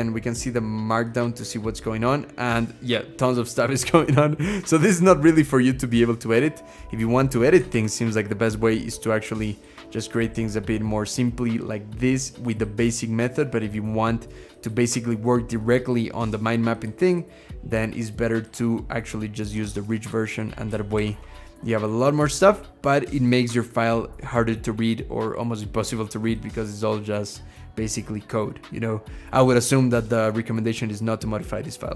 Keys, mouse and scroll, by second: 1.7-2.3 scroll down 4, 2.3-2.9 scroll down 6, 2.9-5.5 scroll up 12, 9.7-10.6 scroll down 3, 10.6-11.9 scroll up 8, 13.4 scroll up 3, 20.8 ctrl+shift+h, 27.6-28.3 scroll down 4, 28.3-28.8 scroll down 2, 28.8-31.1 scroll up 10.